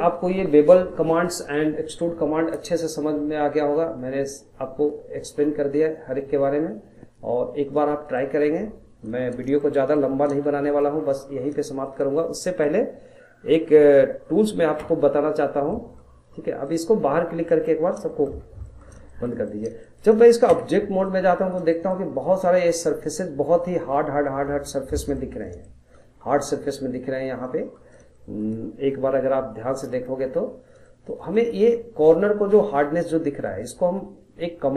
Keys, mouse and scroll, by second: 1.5-4.7 drag, 8.2 middle click, 8.6-9.6 scroll down 1, 9.6-11.3 shift+middle drag, 11.3 scroll up 1, 11.7-14.7 shift+middle drag, 14.7 t, 16.8 click, 17.3 scroll down 1, 17.5 middle click, 17.8 scroll up 2, 18.1 shift+middle click, 18.4 scroll down 1, 18.6-20.5 middle drag, 20.5 Tab, 20.8 scroll down 2, 21.0 middle click, 21.4 scroll up 1, 21.7 shift+middle click, 22.1-23.1 scroll up 13, 23.1-23.9 shift+middle drag, 23.9-24.7 scroll down 5, 24.7-27.0 shift+middle drag, 27.0-27.4 scroll down 1, 27.4-28.9 middle drag, 28.9 KP_Decimal, 29.6 scroll down 1, 29.9-30.3 middle drag, 30.3-30.8 scroll up 3, 30.8-31.7 shift+middle drag, 31.7-32.3 scroll up 8, 32.7 scroll down 2, 33.0-34.7 middle drag.